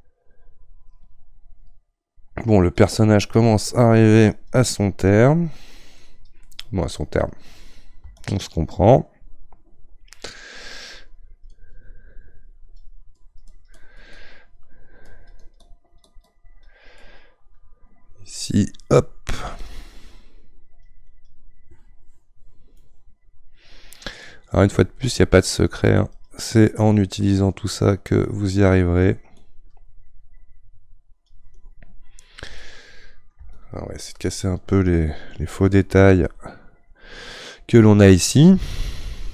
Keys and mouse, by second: 2.7-6.4 drag, 6.4-8.1 middle drag, 8.1-14.1 shift+drag, 14.1 middle click, 15.1-16.9 drag, 16.9-19.7 middle drag, 19.7-22.7 drag, 22.7-24.7 middle drag, 24.7-27.1 drag, 27.1-29.3 middle drag, 29.3-32.5 shift+drag, 32.5 middle click, 33.5-36.5 shift+drag.